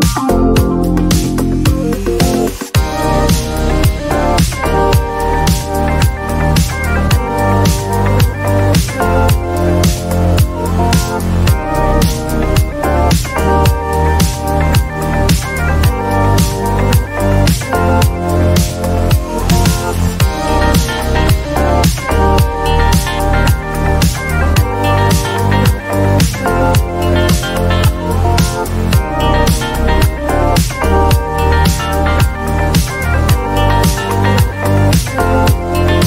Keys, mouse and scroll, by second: 0.1 click, 0.4 click, 0.8 click, 1.1 click, 1.5 click, 1.7 click, 2.2 click, 5.6 right click, 7.7 click, 14.8-18.2 alt+drag, 18.9 click, 21.0 click, 26.7 alt+click, 28.0 click, 28.7 click, 31.2 click, 31.6 click, 35.2-36.0 typing.